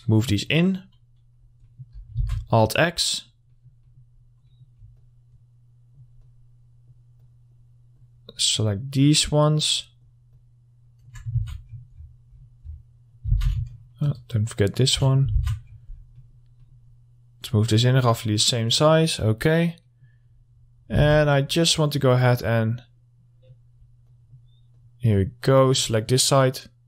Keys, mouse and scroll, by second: 0.8 middle click, 0.9-1.5 scroll down 1, 1.5-1.8 scroll up 1, 1.8 middle click, 2.1 scroll up 1, 2.4 alt+x, 2.7 click, 3.7 middle click, 4.3-4.7 scroll up 1, 4.7 middle click, 5.2-11.5 ctrl+drag, 11.5 alt+x, 11.8-12.5 scroll down 1, 12.5-12.8 scroll up 1, 13.5 alt+x, 13.9-15.5 ctrl+drag, 15.5 alt+x, 15.8 scroll down 1, 16.3 middle click, 16.9-17.7 scroll up 1, 17.7-20.0 drag, 20.0 middle click, 20.5-21.1 scroll up 1, 21.2 alt+x, 21.4 middle click, 21.6-22.3 scroll up 1, 22.3-24.3 drag, 24.9-26.8 ctrl+drag.